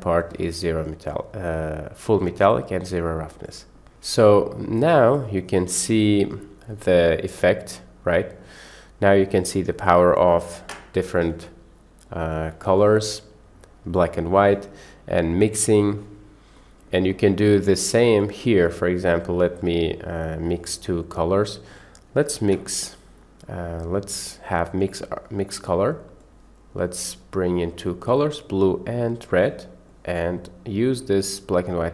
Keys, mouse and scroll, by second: 3.7 click, 5.2 drag, 5.4 click, 7.0-8.5 middle drag, 8.4 click, 9.3-9.8 drag, 11.3 Delete, 12.1 drag, 13.1 click, 14.0 click, 14.9-16.0 middle drag, 16.7 middle click, 17.9 click, 18.5 middle click, 19.3 click, 19.8 middle click, 20.5 middle click, 21.4 click, 22.4 shift+a, 28.1 click, 29.9-30.2 drag, 31.3-31.9 drag.